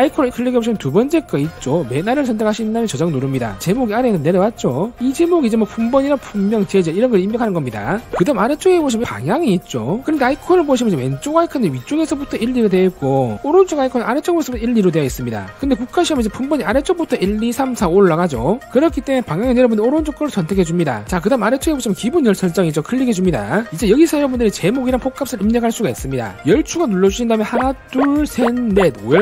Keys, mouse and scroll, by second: 0.9 click, 2.7 click, 20.8 click, 23.5 click, 27.8 click, 28.2 click, 28.6 click, 29.0 click.